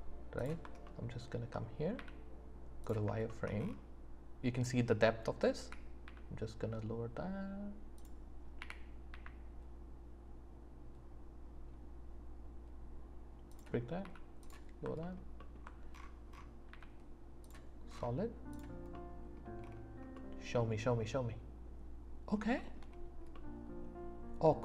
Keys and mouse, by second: 2.0 z, 3.3 shift+click, 5.6 s, 6.0 z, 8.6 g, 9.1 z, 13.5 click, 14.0 s, 16.7 z, 18.9 middle click, 19.7 middle click, 20.1 click, 20.2 middle click, 20.3 click, 20.5-22.4 middle drag, 22.6-24.0 shift+middle drag, 24.0 click, 24.3 middle click, 24.4 click.